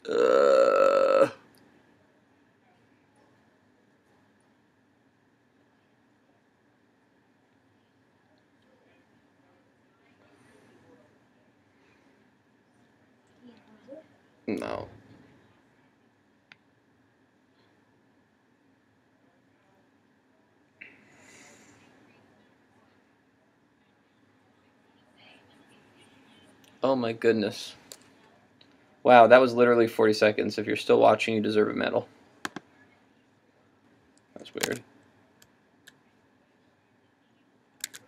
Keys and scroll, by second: 34.7 super+Tab, 37.8 super+Tab.